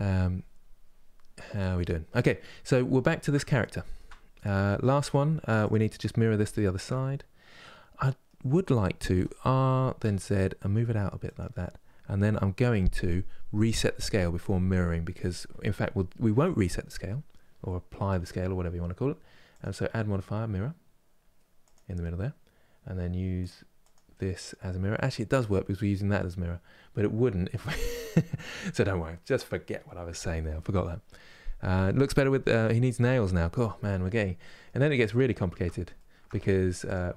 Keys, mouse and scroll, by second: 2.1-2.7 scroll down 1, 2.7-3.8 shift+middle drag, 3.8 scroll up 3, 4.4 Tab, 4.5 middle click, 5.3 click, 5.7-8.8 middle drag, 8.8 r, 21.4-23.7 drag, 24.8-33.7 middle drag, 33.7-34.1 scroll down 1, 34.1-36.6 middle drag, 36.6 click.